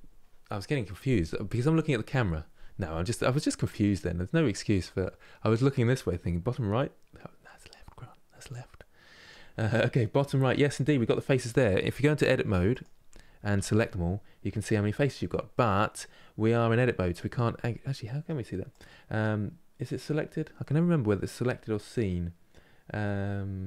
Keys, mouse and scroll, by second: 12.4-14.8 drag, 15.2-17.0 middle drag, 17.0 scroll up 2, 17.3 Tab, 17.7 middle click, 18.4-20.6 drag, 20.6-21.4 scroll down 1, 21.4-23.6 scroll down 1.